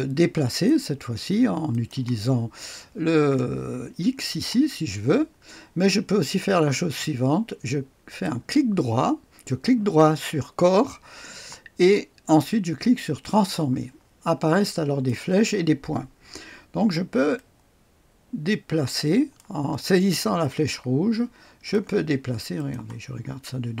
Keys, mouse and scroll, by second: 0.4 click, 1.6 click, 4.2 click, 4.7-5.3 scroll down 1, 5.3-5.9 scroll up 1, 8.1 click, 8.6 click, 13.2 click, 13.2 right click, 14.4 right click, 15.0 click, 17.3-19.3 drag, 20.3-21.7 drag, 22.5 click, 23.1-23.8 scroll up 1.